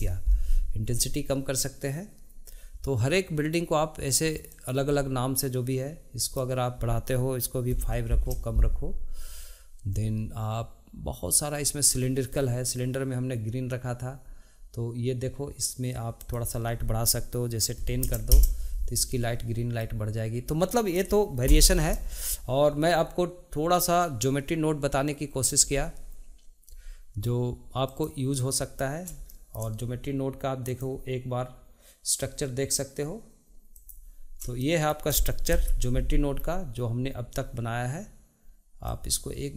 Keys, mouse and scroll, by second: 4.6 click, 6.4-9.4 drag, 11.8 click, 16.3-19.4 drag, 21.6 n, 28.0 click, 29.4-30.8 shift+middle drag, 30.8-34.0 drag, 34.7 shift+middle click, 35.6 KP_Decimal, 36.5-38.2 scroll down 1, 38.2-39.0 scroll down 1, 39.0 click.